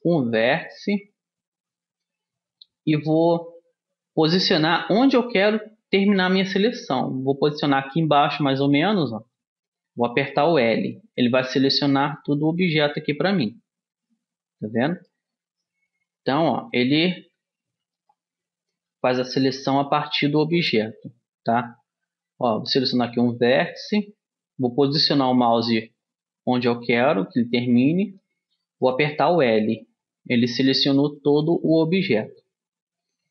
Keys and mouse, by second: 0.3-2.0 drag, 10.5 l, 11.8-13.6 middle drag, 17.6 Tab, 19.7 a, 20.7-22.3 drag, 21.0 Tab, 29.4 l.